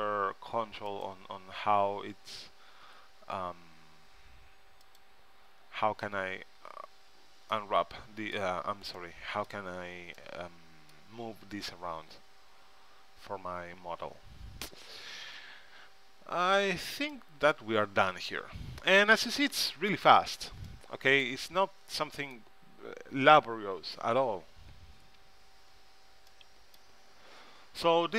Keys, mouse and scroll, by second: 1.1-2.9 drag, 3.0 g, 7.7-10.7 middle drag, 11.1 middle click, 12.7 KP_1, 13.4 KP_3, 14.9 z, 18.6 Tab, 19.9 z, 27.9-28.1 middle drag.